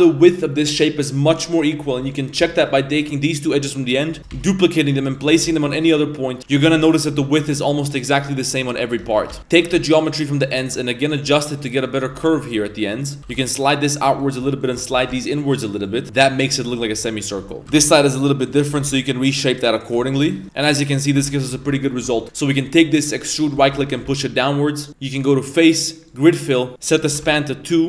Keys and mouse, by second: 1.8 2, 2.0 right click, 2.5 shift+right click, 4.2-7.1 typing, 9.2 x, 9.4 1, 11.0 right click, 14.2 right click, 14.6 shift+right click, 16.0 Tab, 16.0 g, 16.2 Tab, 16.6 Tab, 17.0 shift+middle drag, 17.6 Tab, 17.6 ctrl+z, 17.6 g, 18.7 g, 19.7 right click, 20.0 Tab, 20.5 Tab, 20.5-21.0 middle drag, 20.5 1, 21.1 Tab, 21.4 1, 21.8 alt+right click, 22.1 shift+middle drag, 22.6 middle drag, 23.1 e, 23.6 shift+middle click, 23.8 g, 24.9 z, 25.1-26.2 drag, 26.9 click.